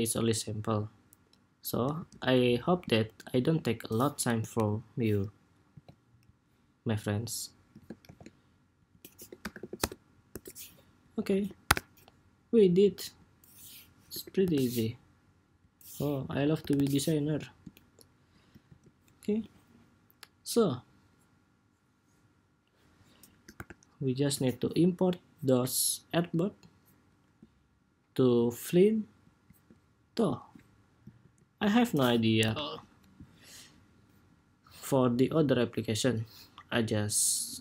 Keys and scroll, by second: 1.7 super+s, 5.4 super+c, 7.7 shift+super+v, 18.3 super+s, 30.9 super+s, 32.1 super+=.